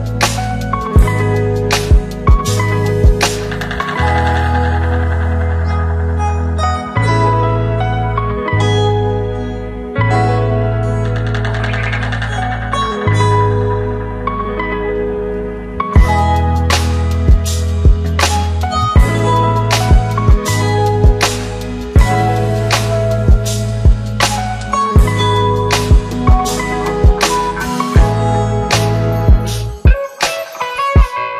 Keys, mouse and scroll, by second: 1.2 click, 3.1 scroll up 1, 3.8 click, 5.9 click, 8.9 click, 10.5 c, 10.6 c, 10.8 space, 11.2 c, 13.1-14.4 click, 15.3-16.4 scroll up 1, 16.7 click, 18.1 click, 18.8 Return, 20.0 click, 20.7 Return, 22.3 click, 24.2 Return, 26.5 click, 30.7-31.3 drag.